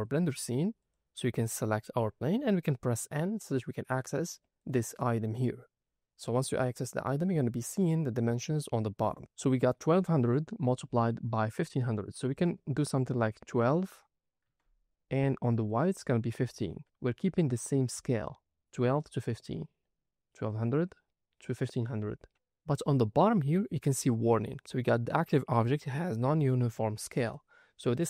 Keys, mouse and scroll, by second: 0.7 click, 3.3 n, 4.5 click, 12.3-14.4 drag, 15.6-16.8 drag, 19.4-21.0 scroll down 6.